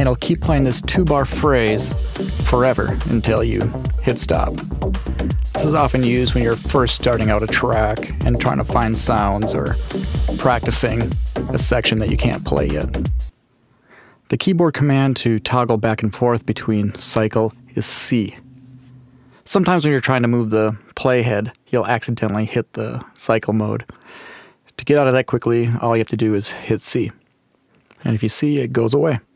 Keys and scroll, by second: 13.1 space, 18.7 c, 27.9 c.